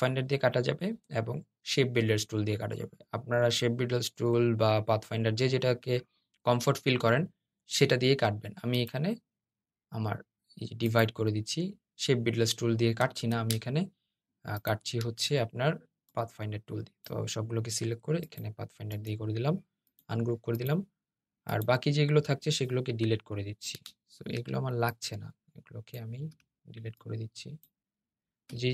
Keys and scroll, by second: 13.1 super+z, 23.0 BackSpace.